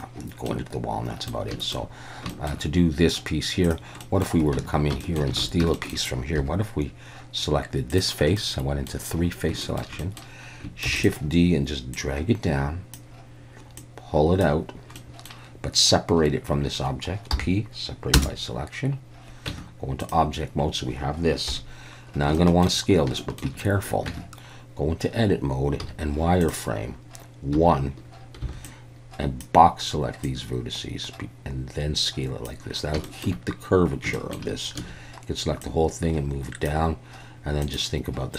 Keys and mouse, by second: 0.5-1.3 middle drag, 1.6 shift+middle click, 2.3 shift+middle drag, 3.7 drag, 4.0 middle click, 4.6 Tab, 5.0 shift+middle click, 5.4 alt+a, 5.8 shift+middle click, 6.4 3, 7.9 click, 8.4 middle click, 9.6 shift+middle click, 10.0 middle click, 10.9 shift+d, 12.0 click, 13.9 click, 15.0 middle click, 17.3 p, 19.5 Tab, 20.1 drag, 21.5 KP_1, 22.4 shift+drag, 23.2 shift+middle drag, 24.1 Tab, 25.8 z, 27.6 1, 28.4 b, 30.3-32.5 drag, 33.1 shift+middle click, 34.2 shift+middle click, 34.8 a, 35.7-36.7 drag.